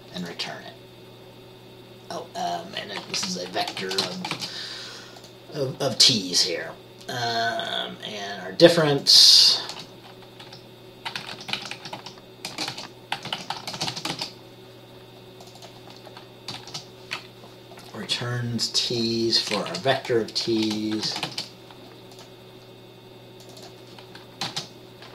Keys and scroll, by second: 3.3 Right, 3.9 shift+,, 4.2 shift+t, 4.5 shift+., 9.9 Return, 10.6-14.3 typing, 16.7 typing, 18.8-19.5 typing, 19.9 Right, 20.6-21.4 typing, 24.6 t.